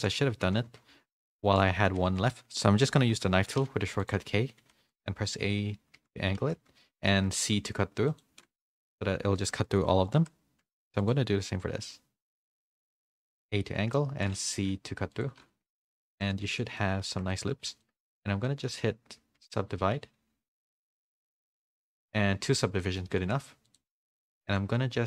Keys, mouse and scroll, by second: 0.4 ctrl+z, 0.6-3.1 typing, 16.5 z, 16.7 middle click, 17.1 Tab, 17.3 middle click, 17.8 shift+middle click, 18.4 middle click, 19.8 ctrl+1, 20.6 ctrl+2, 22.2 a, 22.5 middle click, 22.5 a, 23.5 a.